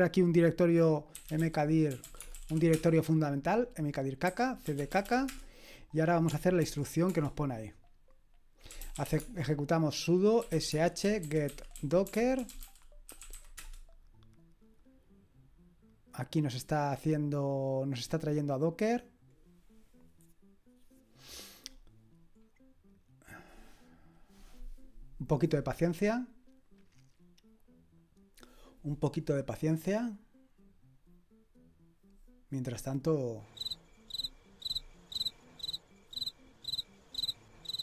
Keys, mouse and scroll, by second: 0.9-2.9 typing, 4.0-5.5 typing, 6.6 ctrl+alt+v, 7.1 Return, 8.4-13.8 typing, 32.9 click.